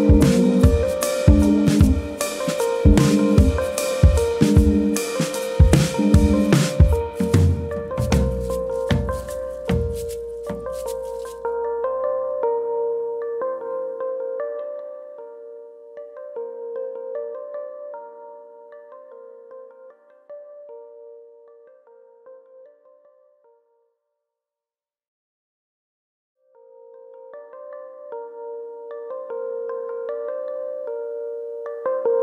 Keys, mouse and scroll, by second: 0.0 ctrl+KP_Add, 0.1 ctrl+KP_Add, 0.3 ctrl+KP_Add, 0.5 ctrl+KP_Add, 0.6 ctrl+KP_Add, 1.8 ctrl+KP_Add, 2.7 click, 6.7 ctrl+KP_Add, 7.5 ctrl+KP_Add, 8.8 click, 11.5 middle click, 12.2-12.7 scroll up 4, 12.7 shift+middle click, 13.2-13.9 scroll up 2, 13.6 shift+middle click, 13.9-14.7 scroll down 5, 14.7 middle click, 15.1-15.6 scroll down 2, 15.4 shift+middle click, 15.8 middle click, 16.2 Tab, 16.4 click, 16.6 Tab, 17.1 Tab, 17.4 middle click, 17.7-18.2 scroll up 2, 17.9 shift+middle click, 18.2 click, 18.3 Tab, 18.6-19.6 scroll up 2, 18.8 middle click, 19.8 click, 20.2 shift+click, 20.5 middle click, 21.1 shift+click, 21.4 right click, 22.7 middle click, 23.5 click, 23.9 shift+click, 24.7 j, 25.1 middle click, 25.8 click, 26.2 shift+click, 27.1 j, 27.6 middle click, 29.4 2, 29.6 click, 29.9 middle click, 30.6 shift+click, 31.4 x.